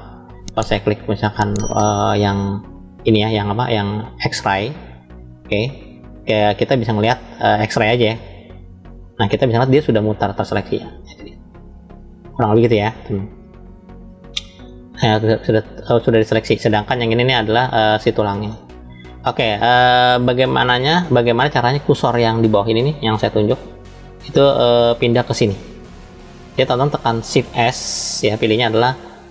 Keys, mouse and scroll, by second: 2.0 click, 4.9 click, 6.5 click, 8.4 click, 9.5-12.3 middle drag, 12.5-14.7 middle drag, 14.9-15.5 scroll up 2, 15.9 middle click, 20.1-21.3 middle drag, 21.2-22.0 scroll down 2, 22.1-23.0 scroll down 1, 27.6 shift+s.